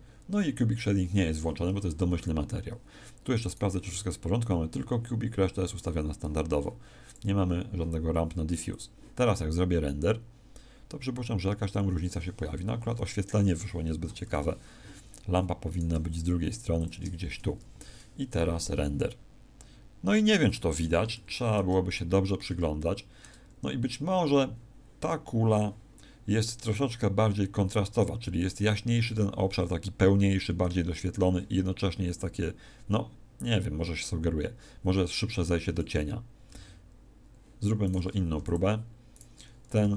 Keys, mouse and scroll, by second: 3.4 right click, 7.0 click, 8.6 click, 13.8 Escape, 13.8 scroll up 2, 14.0 KP_1, 14.2 KP_7, 15.6 right click, 15.8 g, 16.8 click, 36.4 Escape, 37.8 right click, 38.3 x, 39.1 right click, 39.8 g.